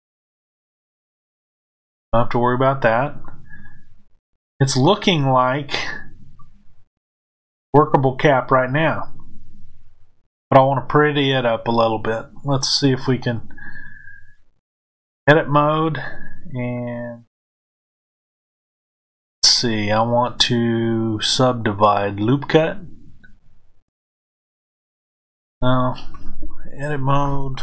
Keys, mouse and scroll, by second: 0.1 click, 4.0-13.2 middle drag, 13.2-16.7 drag, 16.7-27.6 middle drag.